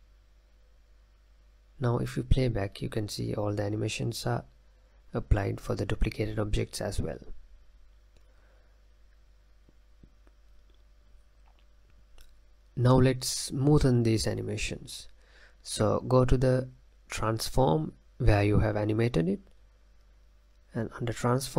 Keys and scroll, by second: 2.3 space, 4.4 space.